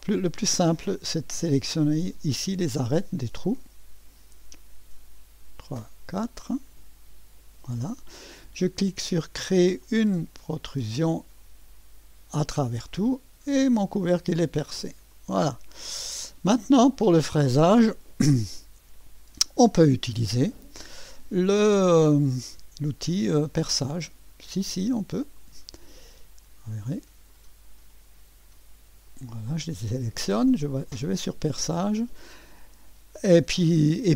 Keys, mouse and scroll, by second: 0.0 click, 1.8 click, 3.6 click, 5.4 click, 7.4 click, 9.8 click, 12.9-14.1 drag, 15.1 click, 16.5 click, 20.3 scroll down 2, 23.1 click, 25.4 ctrl+click, 27.3 ctrl+click, 29.1 ctrl+click, 31.1 click.